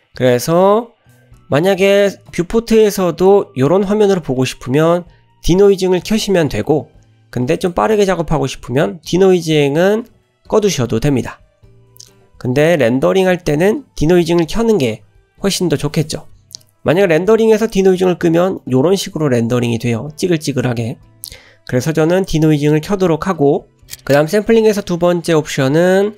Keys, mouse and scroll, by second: 6.1 middle click, 8.5 click, 17.7 click, 18.4 middle click, 18.6 scroll up 1, 22.2 click.